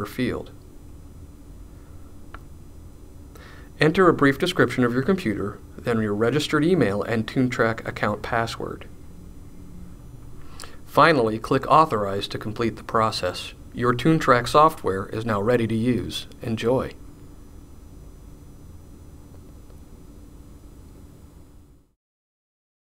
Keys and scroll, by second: 5.8-7.9 typing.